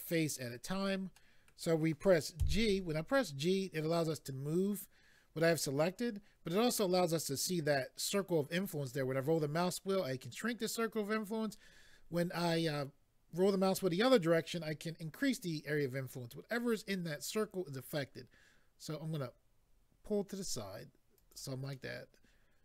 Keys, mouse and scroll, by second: 1.1 middle click, 2.4 g, 9.0-10.2 scroll up 2, 11.4-12.7 scroll down 4, 21.2 click, 21.3 click, 21.7 middle click.